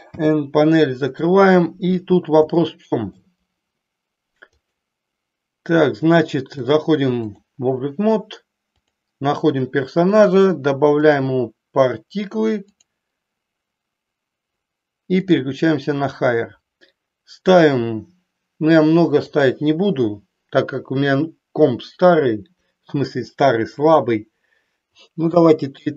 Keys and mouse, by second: 0.0 n, 2.5 shift+middle click, 4.5 click, 6.6 click, 8.6 click, 12.6 click, 19.2-25.9 drag.